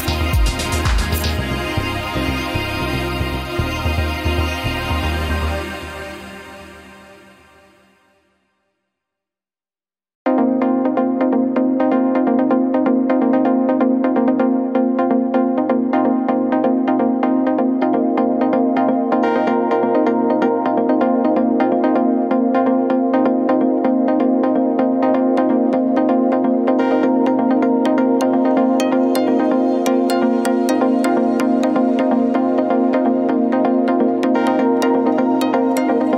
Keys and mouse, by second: 1.5-2.0 middle drag, 5.0 s, 9.1-9.4 middle drag, 9.9-12.5 middle drag, 19.7-20.0 middle drag, 25.0-27.7 middle drag, 28.0 ctrl+s, 28.5-29.0 middle drag, 32.7-33.2 middle drag, 35.0 middle drag.